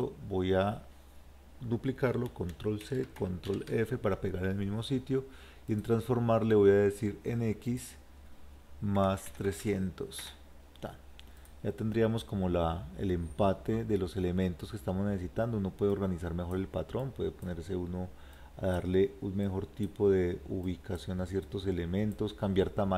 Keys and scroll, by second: 2.9 ctrl+c, 3.5 ctrl+f.